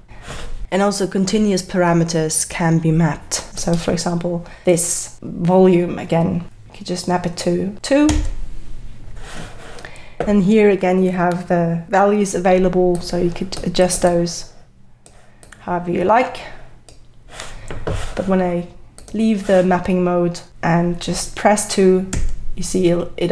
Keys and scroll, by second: 8.1 2, 22.1 2.